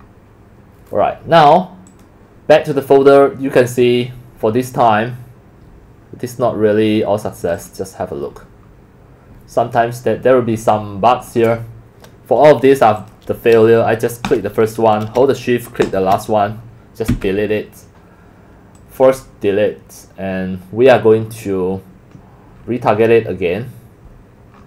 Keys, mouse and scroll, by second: 0.9 click, 1.9 click, 10.4 click, 11.3 click, 13.0 click, 14.3 click, 16.0 shift+click, 17.1 Delete, 18.6 click, 19.0 click.